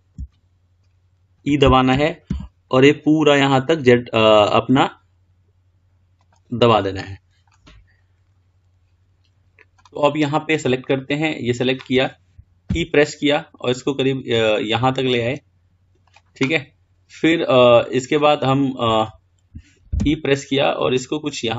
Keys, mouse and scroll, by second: 0.5-2.2 shift+middle drag, 2.2 e, 7.0-8.2 middle drag, 8.2-9.7 scroll down 7, 10.8 click, 12.9 e, 19.0-20.2 scroll down 3, 20.2 e.